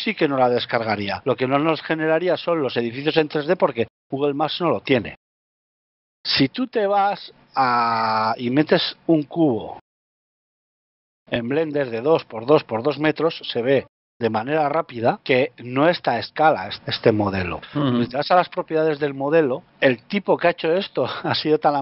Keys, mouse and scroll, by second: 5.0 shift+middle click, 5.4 scroll up 3, 6.8 scroll up 1, 6.8 n, 8.4 shift+middle click, 9.6 shift+a, 12.0 scroll down 5, 14.0 click, 17.5 scroll up 2, 17.7-18.6 scroll down 2, 18.6 n.